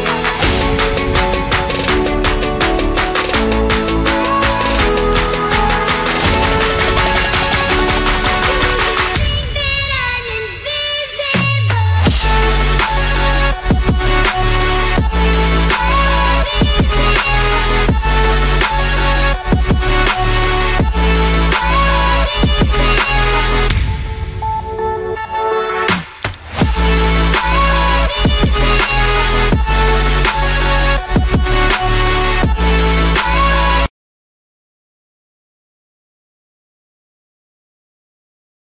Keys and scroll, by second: 15.0 ctrl+alt+z.